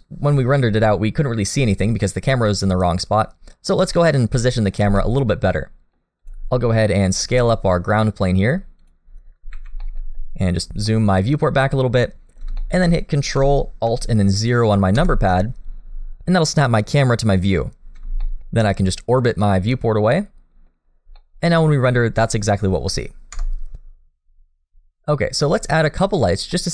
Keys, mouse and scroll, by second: 2.5 middle click, 3.6-4.0 scroll up 2, 4.0 middle click, 4.9 shift+middle click, 5.5 middle click, 6.2 click, 6.7-9.2 scroll down 2, 7.2 s, 9.2-9.6 scroll up 2, 9.6 alt+a, 9.8 middle click, 10.2-10.7 scroll down 2, 10.7 shift+middle click, 10.7 scroll up 1, 10.9 middle click, 12.6 shift+middle click, 14.9 ctrl+alt+KP_0, 15.3 scroll down 2, 17.6-18.2 scroll up 3, 18.2 shift+middle click, 19.4 middle click, 20.8-21.2 scroll down 2, 21.2 middle click, 25.7 F12, 26.5 middle click.